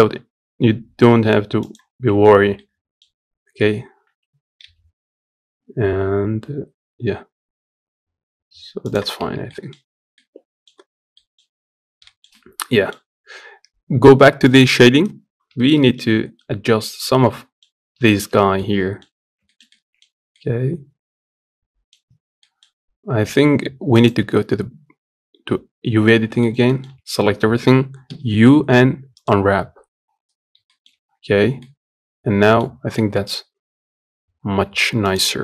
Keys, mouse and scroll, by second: 1.7 scroll down 1, 2.0 Tab, 2.3-3.3 middle drag, 3.3 Tab, 9.2 middle click, 9.5-9.9 scroll up 1, 9.9 middle click, 10.5-10.9 scroll down 1, 10.9 middle click, 11.2 scroll up 1, 11.9 shift+middle click, 12.7 scroll down 2, 13.0-14.3 scroll up 4, 14.3 click, 15.1 scroll up 1, 15.3-17.5 shift+middle drag, 17.5 scroll up 1, 17.8-18.9 shift+middle drag, 18.9-19.2 scroll up 2, 19.2-21.8 shift+middle drag, 21.8 Tab, 22.2-23.8 middle drag, 23.8 click, 25.0 scroll up 1, 25.9 scroll up 1, 26.2 shift+middle click, 26.7 a, 31.4-32.7 middle drag, 32.7 s.